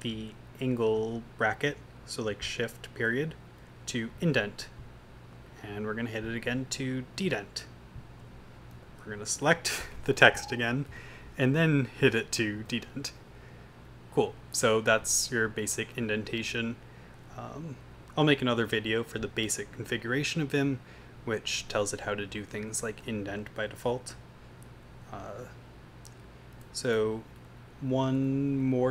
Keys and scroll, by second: 0.3 Up, 3.8 shift+., 7.1 shift+,, 8.7 v, 8.9 Down, 9.1 Down, 10.2 u, 11.0 v, 11.1 Down, 11.2 Down, 12.6 shift+,, 16.9 Down, 17.4 Up, 18.1 Down, 22.3 Up, 22.8 Down, 23.7 Down, 24.8 Down, 26.7 Down, 27.6 Up, 28.4 Up.